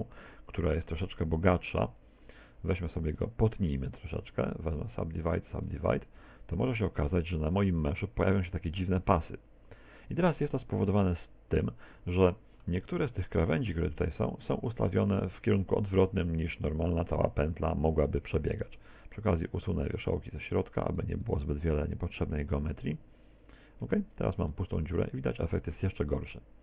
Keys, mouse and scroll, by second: 0.0 z, 0.4 middle click, 3.6 w, 5.0 w, 5.7 Tab, 6.3 z, 7.1 middle click, 10.8 middle click, 12.1 middle click, 12.9 Tab, 13.2 scroll up 4, 16.7 z, 18.5 a, 19.1 right click, 19.6 shift+right click, 20.0 shift+right click, 20.3 right click, 20.6 right click, 20.9 shift+right click, 21.3 shift+right click, 21.7 shift+right click, 22.1 shift+right click, 22.5 x, 23.9 z, 24.5 middle click, 25.7 middle click.